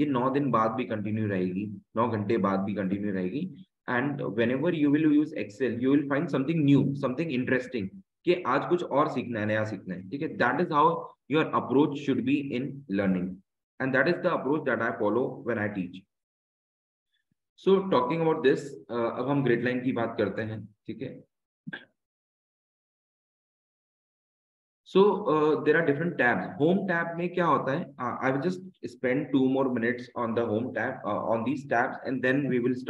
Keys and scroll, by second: 28.1 Tab.